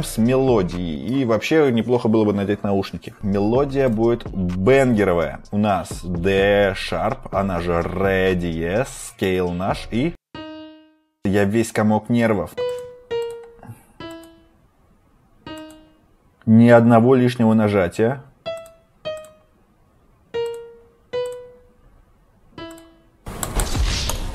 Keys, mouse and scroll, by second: 12.5 click, 19.1 click, 22.9 scroll, 23.7 click, 24.0 click.